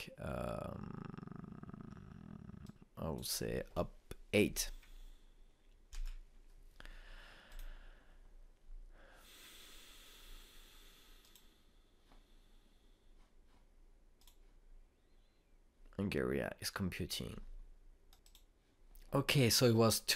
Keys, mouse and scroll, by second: 3.6-6.6 drag, 8.5 click, 12.4 click, 15.2 click, 19.1 click, 19.1 click.